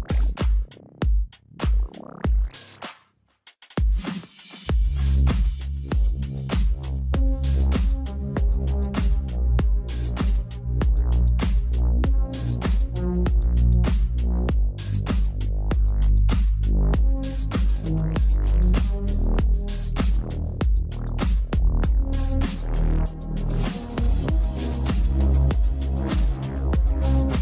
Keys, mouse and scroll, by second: 0.6 r, 1.2 scroll down 3, 1.5 shift+middle click, 2.2 shift+d, 4.4-5.3 shift+middle drag, 5.3 shift+d, 7.9 shift+d, 9.8-10.7 shift+middle drag, 10.7 shift+d, 13.1-13.9 shift+middle drag, 13.9 shift+d, 18.8-19.7 scroll down 3, 19.7 shift+z, 21.1 click, 21.2 scroll up 4, 22.1 scroll up 2, 22.2-25.2 middle drag, 26.8 KP_1.